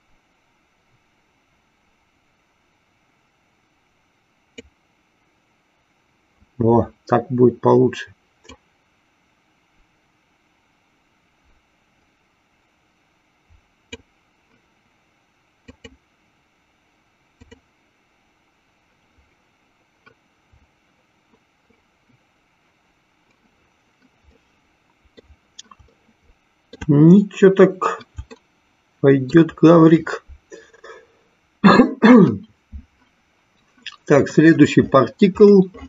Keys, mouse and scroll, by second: 8.4-14.4 drag, 15.7 click, 17.3 click, 24.6 middle click, 26.1 shift+middle click, 28.7 shift+middle click.